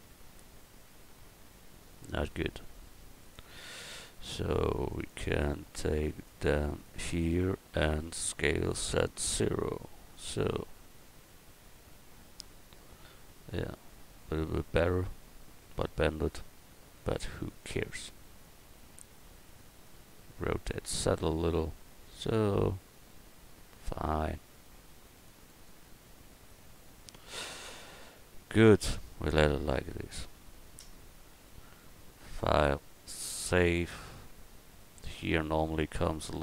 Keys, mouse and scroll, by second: 3.3 right click, 4.9 click, 4.9 right click, 5.6-6.8 drag, 5.6-6.8 right drag, 8.3 s, 10.7 middle click, 11.6-13.2 middle drag, 13.3 middle click, 14.4 middle click, 14.8 Tab, 15.1 middle click, 17.6 right click, 18.4-19.8 drag, 18.5 right click, 19.8 right click, 20.7 r, 22.9-24.1 drag, 24.1 right click, 24.2 click, 25.2-26.8 drag, 26.8 Tab, 27.4 a, 28.1 Tab, 29.4 a, 34.0 middle click, 34.2 middle click.